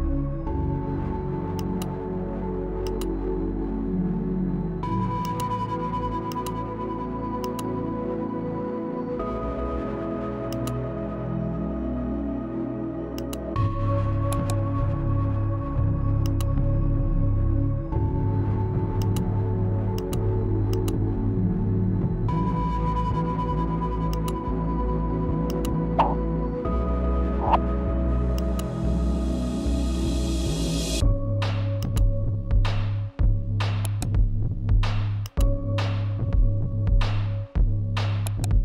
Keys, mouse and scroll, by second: 2.0-5.7 drag, 11.2 click, 13.9 click, 15.3 right click, 17.3 click, 20.1 click, 25.2-29.5 drag, 29.5-33.2 drag, 35.1 right click, 36.3-38.6 drag.